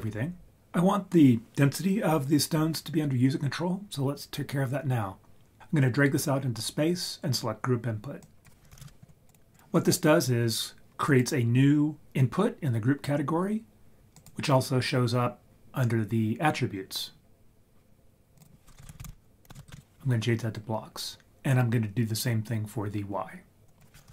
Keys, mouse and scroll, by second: 5.6 click, 8.2-9.5 drag, 9.5 click, 11.1 click, 14.2 click, 18.8 shift+click, 23.7-24.1 drag.